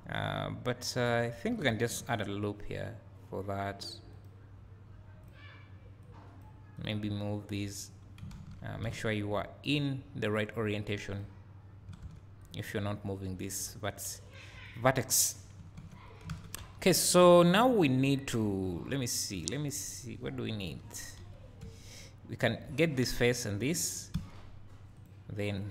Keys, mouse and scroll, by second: 6.0 click, 7.6 click, 10.2 click, 12.9 click, 14.7-16.6 drag, 17.2 `, 17.2-18.6 drag, 20.1 KP_1, 20.3 KP_1, 23.2 click.